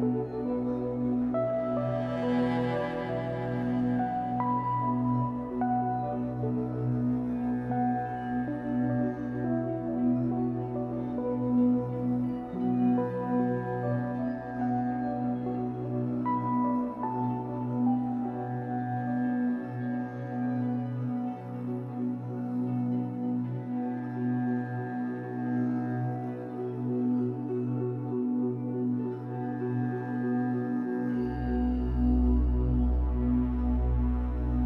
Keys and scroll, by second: 6.3 Escape, 6.5 3, 11.3 w, 15.7 w, 16.7 w, 21.7 Escape, 22.3 2, 29.5 w, 33.6 Escape, 34.0 2.